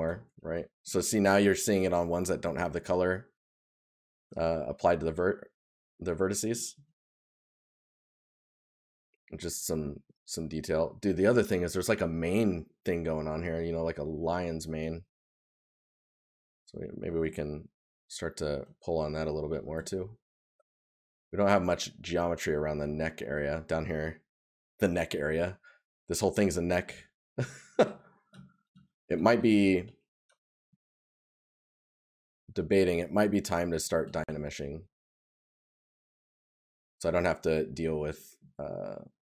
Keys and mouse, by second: 1.5 right click, 4.3 right click, 13.1 right click, 14.7 right click, 25.5 right click, 27.4 right click, 30.2 right click, 33.3 right click, 37.6 right click.